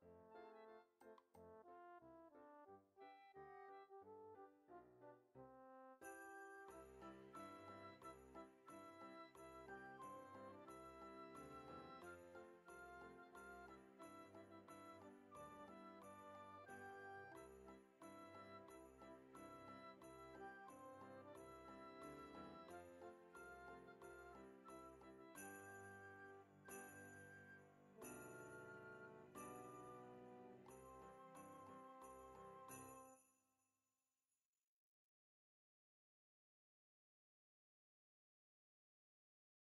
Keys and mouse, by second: 0.5 click, 4.2 click, 5.6 ctrl+Tab, 6.2 click, 7.0 ctrl+Tab, 9.0 click, 9.6 middle click, 10.2 click, 11.5 click, 17.9 click, 20.3 click, 22.7 click, 23.1 middle click, 23.5 click, 26.2 KP_1, 27.3 middle click, 27.8 click, 29.2 KP_1, 30.4 ctrl+Tab, 30.9 click, 31.5 middle click, 31.8 ctrl+Tab, 32.8 middle click, 34.5 click, 36.5 KP_1, 37.3 ctrl+Tab, 38.0 click, 39.4 ctrl+s.